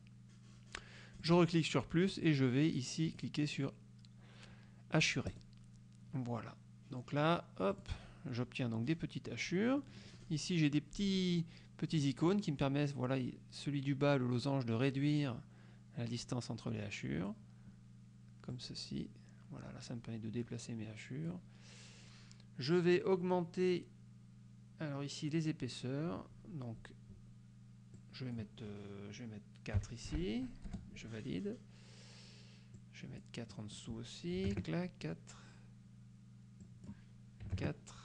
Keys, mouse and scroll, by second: 1.3 click, 3.2 click, 5.4 click, 7.8 click, 9.8 click, 10.8 click, 12.1-17.6 drag, 18.6 click, 26.5-27.8 scroll up 4, 28.0 click, 29.9 KP_4, 30.2 Delete, 30.8 Return, 32.8 click, 33.6 click, 34.5 KP_4, 36.7 click, 37.6 KP_4.